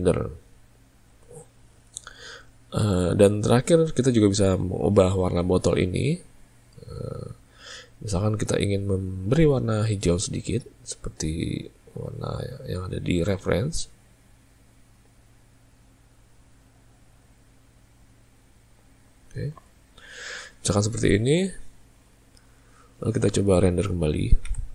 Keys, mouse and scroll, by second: 5.5 click, 7.1 click, 8.3 click.